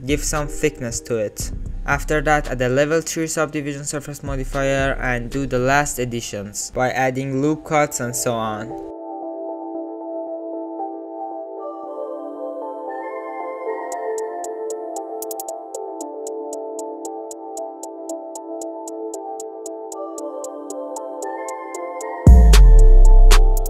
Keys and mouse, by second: 1.2 ctrl+3, 1.7 click, 1.9 click, 2.6 click, 2.9 click, 3.5 click, 3.9 middle click, 4.2 middle click, 4.6 shift+click, 4.9 click, 5.7 click, 6.0 alt+z, 6.1 click, 6.3 ctrl+r, 6.7 alt+z, 6.8 g, 7.0 click, 7.2 alt+z, 7.4 alt+z, 7.4 click, 7.7 alt+z, 8.0 ctrl+r, 8.5 g, 8.8 alt+z, 8.9 click, 9.2 alt+z, 9.4 g, 9.8 click, 9.9 ctrl+r, 10.3 alt+z, 10.5 g, 10.7 click, 11.0 alt+z, 11.3 alt+z, 11.4 g, 11.8 alt+z, 11.8 click, 12.3 alt+z, 12.3 alt+click, 12.5 alt+z, 12.5 click, 12.7 alt+click, 12.9 g, 13.3 s, 14.2 s, 14.2 g, 14.4 alt+z, 14.6 alt+z, 14.6 click, 14.8 ctrl+r, 15.1 alt+click, 15.4-17.5 typing, 16.6 middle click, 18.0 alt+z, 18.1 middle click, 18.3 click, 18.4 alt+z, 18.5 click, 18.7 click, 19.1 click, 19.5 g, 20.0 alt+z, 20.1 click, 20.8 alt+z, 21.0 alt+click, 21.4 s, 21.9 alt+click, 22.0 alt+click, 22.2 g, 22.4 alt+z, 22.5 click, 23.0 ctrl+shift+z, 23.1 ctrl+click, 23.2 ctrl+shift+z, 23.6 click.